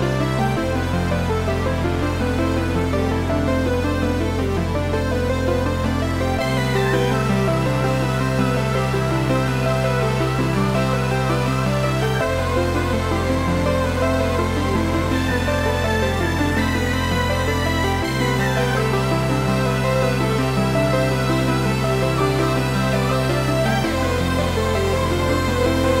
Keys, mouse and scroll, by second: 2.1 click, 2.3 e, 3.6 click, 3.9 Delete, 4.6-6.6 middle drag, 4.9 scroll down 1, 6.2-6.6 scroll up 2, 6.6 click, 7.0 shift+click, 7.3 shift+click, 8.2 e, 9.8 click, 10.0 Tab, 10.2 scroll down 1, 10.5 click, 10.8-15.8 middle drag, 17.0 shift+right click, 17.8 Tab, 18.6 shift+a, 20.1 r, 21.5 KP_Enter, 21.9 s, 22.9 click, 23.3 g, 24.2 click, 24.7 s.